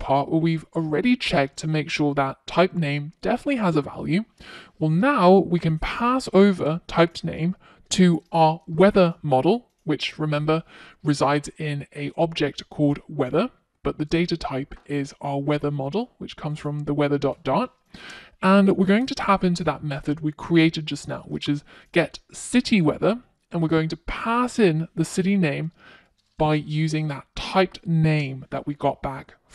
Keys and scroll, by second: 25.3 Return.